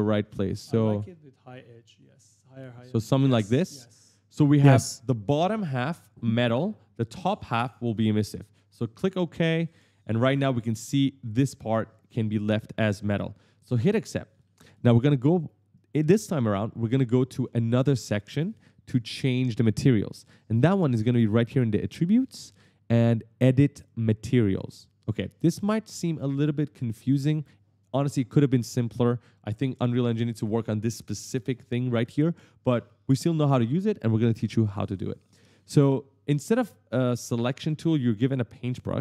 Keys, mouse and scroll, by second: 8.9 click, 9.2-10.7 typing, 10.0 right click, 10.7 right click, 13.7 click, 14.2 right click, 15.4-16.2 typing, 15.9 right click, 17.0 right click, 17.2 s, 17.2 right click, 21.4 click, 24.4 click, 34.8 right click, 34.9 w, 35.1 right click, 35.2 w, 35.4 right click.